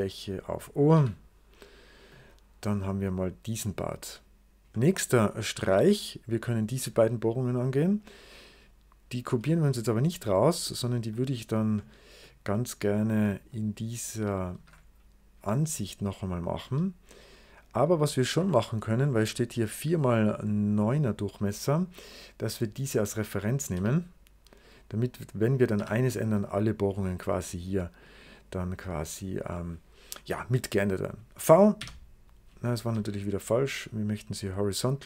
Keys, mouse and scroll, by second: 0.8 0, 2.0 middle click, 4.6 middle click, 5.2 right click, 7.8 click, 8.4 click, 9.0 click, 11.0 middle click, 11.8 middle click, 12.1 middle click, 13.1 middle click, 13.4 right click, 14.4 alt+shift+w, 15.3 right click, 16.5 c, 17.0 click, 17.5 click, 18.2 c, 18.4 click, 18.7 click, 19.9 click, 21.1 right click, 22.5 click, 23.3 click, 23.6 q, 24.5 click, 25.4 click, 25.6 q, 27.9 click, 29.1 click, 29.6 click, 31.7 v, 32.7 ctrl+z, 33.7 click, 34.8 click.